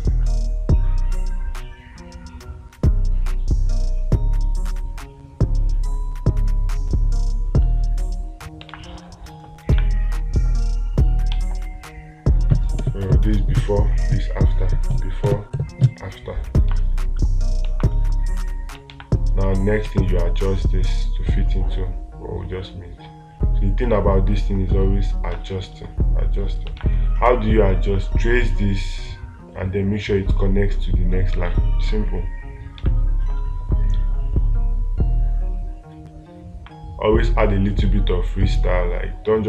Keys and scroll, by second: 9.1 space, 11.8 ctrl+z, 19.3 space, 25.8 space, 27.2 space, 31.8 space.